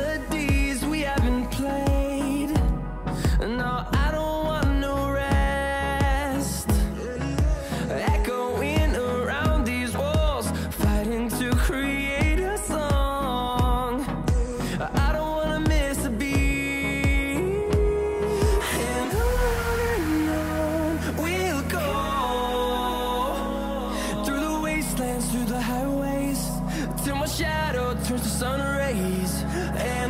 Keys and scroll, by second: 2.6 ctrl+j, 3.3 ctrl+shift+j, 3.6 ctrl+a, 6.3 ctrl+shift+j, 6.4-8.1 typing, 25.7-29.2 typing.